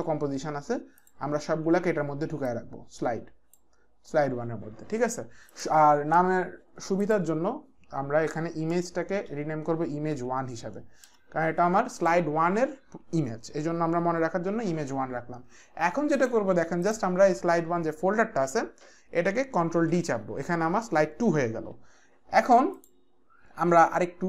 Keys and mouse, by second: 1.0 ctrl+click, 2.5 click, 5.5 click, 7.0 click, 8.7 Return, 9.2 Right, 10.1 KP_1, 11.1 Return, 12.0 click, 16.1 click, 19.8 d, 22.8 click.